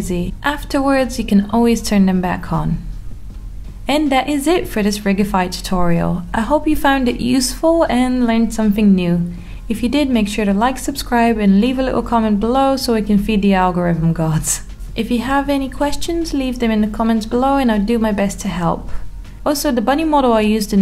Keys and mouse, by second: 0.1-1.5 middle drag, 1.6 g, 3.6 click, 4.4 click, 4.9 g, 6.9 click, 7.3 click, 8.1 r, 10.4 click, 11.1 r, 12.3 click, 13.2 r, 14.3 click, 15.7 click, 17.4-17.8 middle drag, 17.9 r.